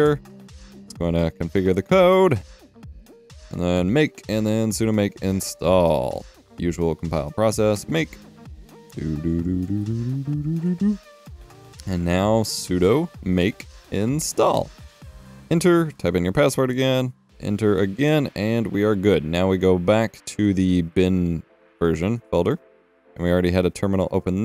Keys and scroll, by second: 2.1 typing, 4.8 alt+Tab, 7.3 typing, 8.5 typing, 11.1 Return, 11.2 alt+Tab, 12.4 s, 13.5-15.0 typing, 15.4 Return, 17.2 Return, 23.2 alt+Tab.